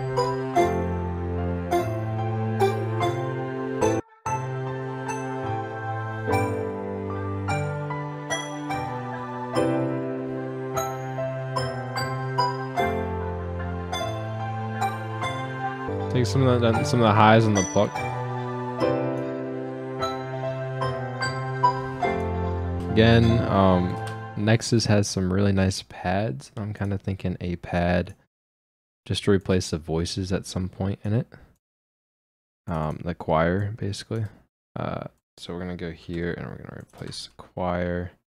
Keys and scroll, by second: 8.2 F9, 22.8 space, 24.0 space, 36.1 ctrl+c, 37.0 ctrl+v.